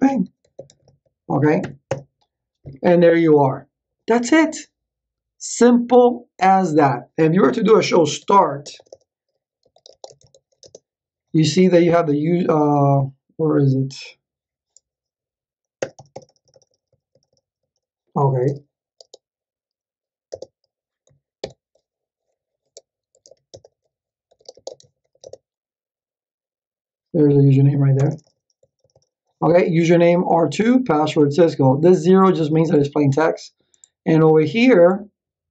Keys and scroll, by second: 0.0-1.6 typing, 1.8 Return, 8.2 ctrl+z, 8.6 Return, 9.4-11.0 typing, 15.8 Return, 19.0 space, 20.3 Return, 22.4 ctrl+c, 22.9-25.6 typing, 27.9 Return.